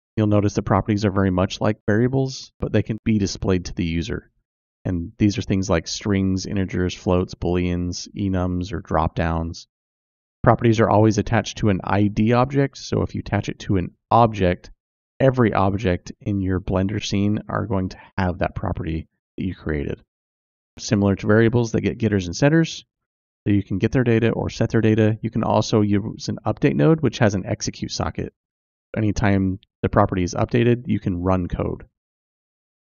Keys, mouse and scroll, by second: 0.4-31.0 drag.